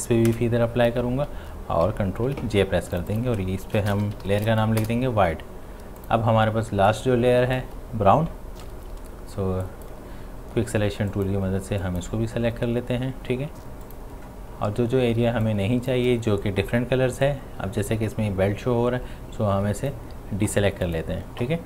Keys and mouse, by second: 0.3 Return, 2.3 ctrl+j, 3.0 click, 3.4-4.8 typing, 4.8 Return, 6.0 click, 6.7 space, 6.9 click, 7.2 space, 8.6 typing, 9.7 click, 15.2 space, 15.5 click, 15.7 space, 17.3-20.9 alt+drag.